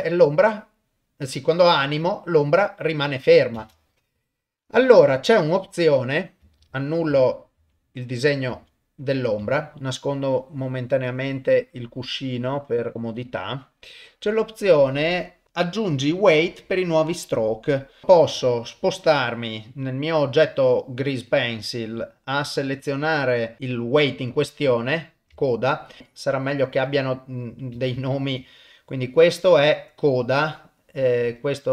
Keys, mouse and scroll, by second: 3.6 shift+space, 4.5 shift+Left, 6.7 ctrl+z, 8.5 ctrl+z, 9.5 ctrl+middle click, 11.1 click, 11.5 middle click, 12.6 click, 12.9 middle click, 13.3 click, 18.0 click, 21.3 click, 22.0 middle click, 23.3 middle click, 23.6 click, 25.4 shift+middle click, 25.8 shift+click, 26.0 ctrl+Tab, 26.5 click, 27.9 ctrl+Tab, 28.5 click, 31.3 click.